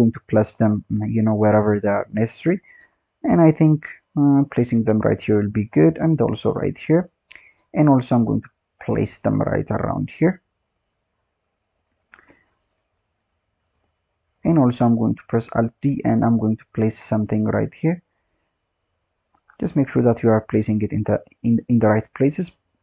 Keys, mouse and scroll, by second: 0.2-0.9 scroll up 10, 0.9 g, 2.6-3.0 scroll down 4, 3.0-3.8 scroll up 5, 3.8 alt+d, 4.8-5.2 scroll down 4, 5.2-6.2 scroll up 3, 6.2 alt+d, 7.1-7.5 scroll down 4, 7.5-8.3 scroll up 4, 8.3 alt+d, 10.0-10.7 scroll down 4, 10.7 click, 13.7 click, 14.3-14.7 scroll down 6, 14.7-15.4 scroll up 6, 15.4 alt+d, 17.7 click, 18.5-19.5 scroll up 6, 19.5 g.